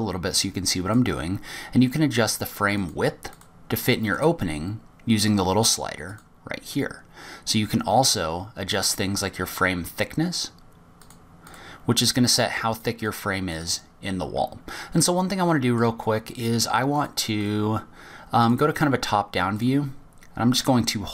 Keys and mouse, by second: 0.0-1.8 drag, 3.6 click, 5.0-7.0 drag, 11.8 click, 12.2 click, 13.8 click, 14.3 click, 15.9-16.6 middle drag, 17.8 click, 20.4 click.